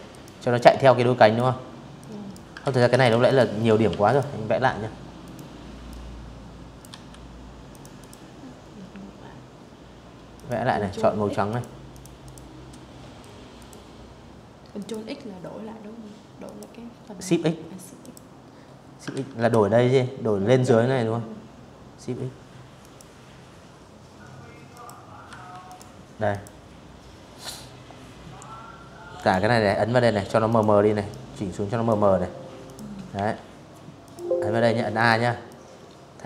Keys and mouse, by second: 0.3 ctrl+z, 0.5 v, 0.6 click, 0.9 click, 1.5 Delete, 1.8 click, 2.9 click, 3.5 click, 4.5 v, 5.4 click, 5.7 click, 8.0 click, 9.1 click, 9.6 click, 9.9 click, 11.2 click, 12.4 click, 14.1 click, 15.7 click, 16.8 ctrl+z, 20.5 click, 22.4 click, 22.9 v, 23.3 click, 24.0 click, 26.8 click, 28.1 click, 28.7-29.5 drag, 30.3 click, 30.8 a, 31.7 click, 32.3 a, 32.6 click, 33.1 click, 34.9 click.